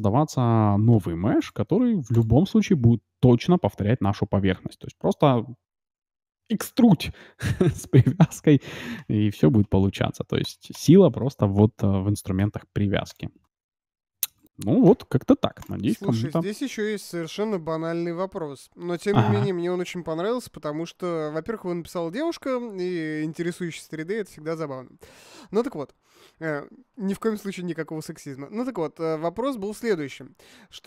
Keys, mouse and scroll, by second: 1.3-4.6 drag, 1.6 g, 10.4-12.5 drag, 12.3 Delete, 13.4-15.5 middle drag, 14.3-16.1 right drag, 14.8 Delete.